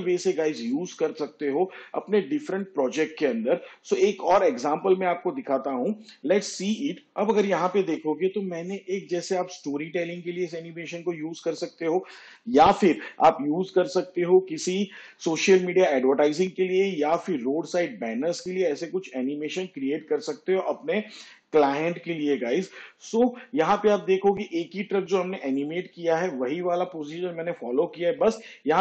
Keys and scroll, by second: 7.1 shift+/, 7.9 space.